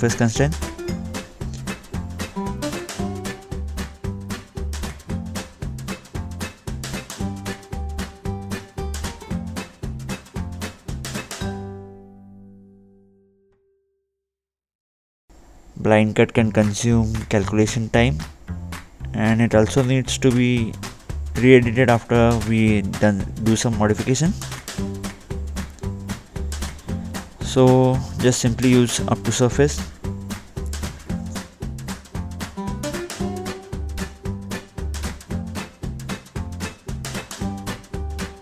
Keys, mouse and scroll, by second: 1.9 ctrl+8, 2.7-3.6 scroll down 2, 4.5 double right click, 5.6 click, 7.0-8.3 scroll down 2, 13.7 click, 14.9-15.7 scroll up 2, 15.8 middle click, 16.8 scroll down 2, 22.3 Escape, 24.0 click, 28.0 click, 28.5 middle click, 29.5-30.2 scroll up 1, 30.2 scroll up 1, 30.3 middle click, 30.6 scroll down 2, 31.3 click, 33.8 right click, 34.9 middle click, 35.4 middle click, 35.6-36.1 scroll up 2, 36.5-37.4 scroll down 2, 37.5 click, 37.7 click.